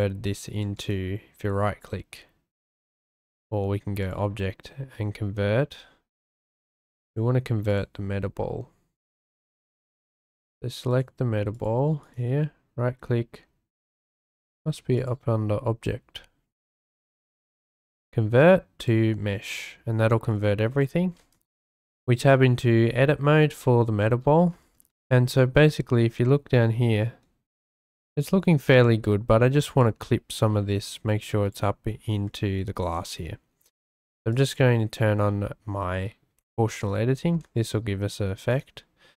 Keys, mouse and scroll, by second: 0.8 click, 4.0-6.4 drag, 7.1 click, 7.7 click, 10.2 click, 10.9 click, 11.5 click, 12.0 click, 15.0-18.9 drag, 20.8-21.1 shift+drag, 21.4 Tab, 23.0 shift+middle click, 23.6 shift+click, 25.1 shift+middle click, 26.5 shift+middle click, 29.0 shift+click, 29.8-31.5 drag, 34.3 click, 37.2 g.